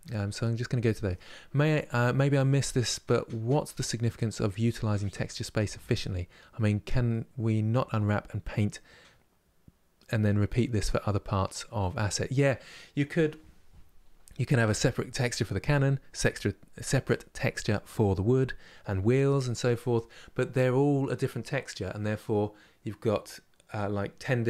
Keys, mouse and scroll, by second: 14.1-24.4 middle drag.